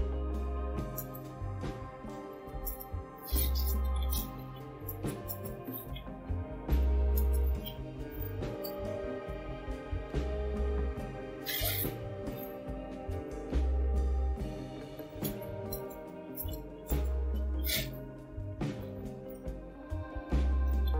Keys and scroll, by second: 0.4-13.2 typing, 15.0-20.9 typing.